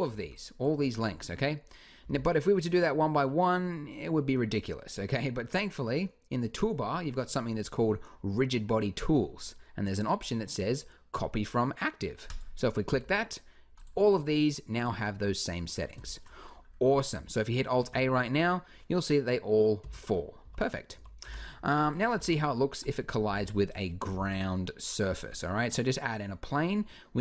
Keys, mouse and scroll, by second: 1.8 t, 5.3-9.6 drag, 12.1 click, 12.6 t, 14.2-16.1 drag, 17.6 alt+a, 19.6 Escape, 20.2 click, 20.2 a, 20.7 a, 21.0 g, 22.0 shift+a, 23.1 s, 23.9 s, 25.0-26.8 drag.